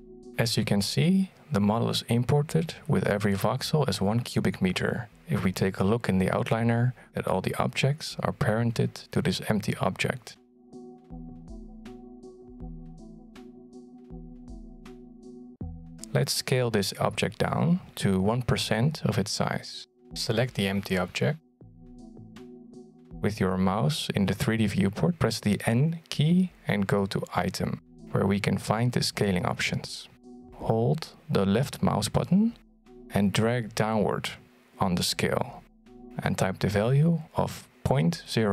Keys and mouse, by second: 9.5-10.7 middle drag, 11.2-13.7 middle drag, 14.4 middle click, 18.5 click, 25.9 middle click, 29.4 n, 31.2-37.4 drag.